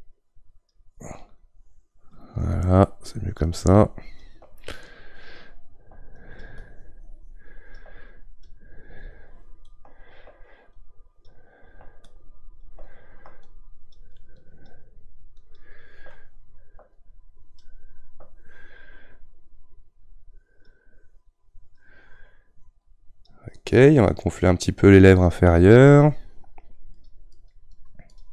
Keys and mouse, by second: 23.8-25.8 middle drag, 25.8-28.3 drag.